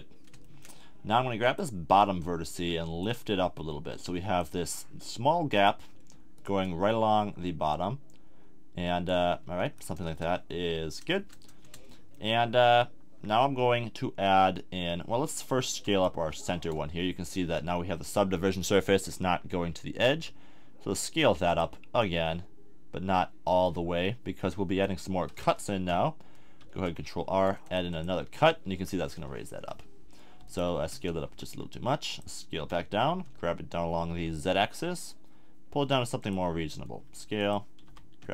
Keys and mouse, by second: 1.4-2.5 middle drag, 2.5 click, 5.5-7.4 drag, 9.4 a, 9.7 middle click, 9.9 middle click, 10.0 Tab, 11.1 Tab, 20.1 s, 21.6 click, 26.6 ctrl+r, 28.0-29.8 drag, 30.5 click, 31.2 s, 32.2 click, 32.6 g, 36.3-38.3 drag, 37.0 s, 37.8 g.